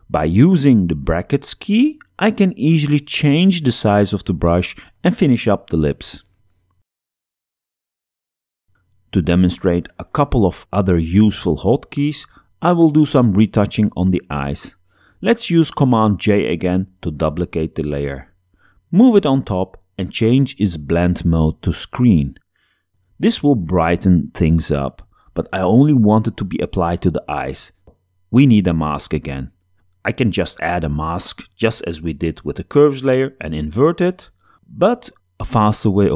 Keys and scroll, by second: 0.7 [, 2.6 ], 3.7 [, 6.1 space, 7.5 x, 9.8 super+0, 15.8 super+j.